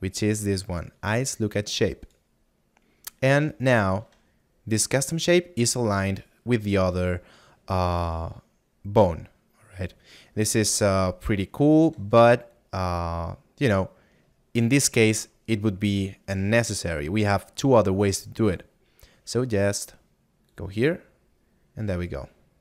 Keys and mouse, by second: 3.6 middle click, 8.2 shift+middle click, 20.8 click.